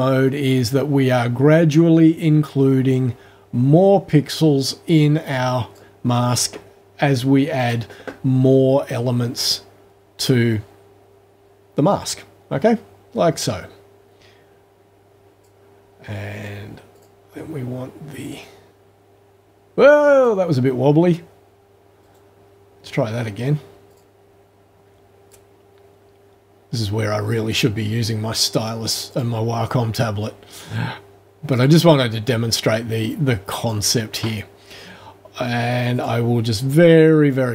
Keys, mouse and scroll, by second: 7.6 click, 9.4-15.6 drag, 17.0 click, 18.4-20.4 drag, 22.0 right click, 23.9 click, 25.3-27.7 drag, 29.1 click, 30.2-31.8 drag, 33.1 click, 36.0 click, 37.3 click.